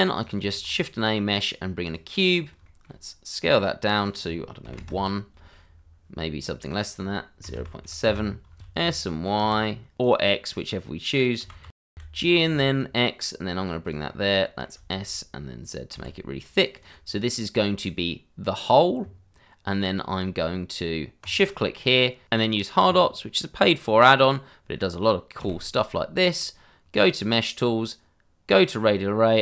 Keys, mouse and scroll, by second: 0.2 click, 0.5 shift+a, 1.8 click, 2.3 scroll up 1, 2.6 shift+middle click, 3.9 click, 4.6 1, 4.7 Return, 6.7 click, 7.4-9.4 typing, 8.0 KP_Enter, 11.7 g, 11.9 y, 12.5 x, 13.8 click, 14.1 middle click, 14.7 s, 15.9 z, 16.7 click, 18.3 scroll up 1, 20.0 scroll down 1, 21.2 shift+click, 23.3 scroll up 1, 23.8 shift+middle click, 25.4 q.